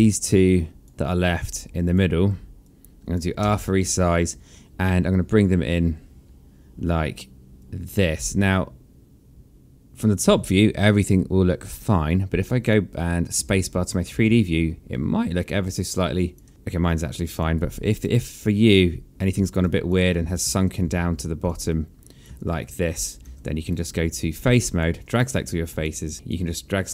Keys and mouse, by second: 0.4 shift+click, 2.6 shift+click, 3.4 r, 7.6 click, 12.0 right click, 12.6 click, 13.4 space, 14.9 alt+click, 16.5 alt+click, 17.5 right click, 18.7 click, 19.8 click, 20.2 e, 20.8 w, 21.7 click, 22.3 alt+click, 23.2 ctrl+z, 23.7 right click, 24.5 alt+click, 25.4 alt+click, 26.5 alt+click.